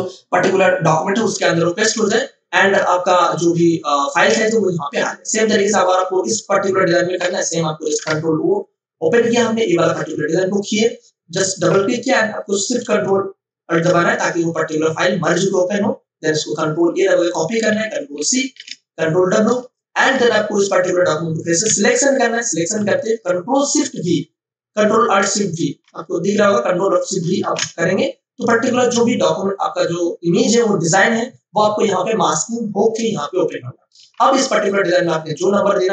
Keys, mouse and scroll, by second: 2.7 click, 5.8 v, 6.2 click, 7.8 ctrl+o, 9.8 click, 16.5 ctrl+a, 18.5 ctrl+w, 19.5 space, 19.7 click, 20.0 space, 20.1 v, 20.5 click, 21.6 w, 22.2 click, 27.4 ctrl+alt+shift+v, 33.9 space, 34.4 ctrl+click.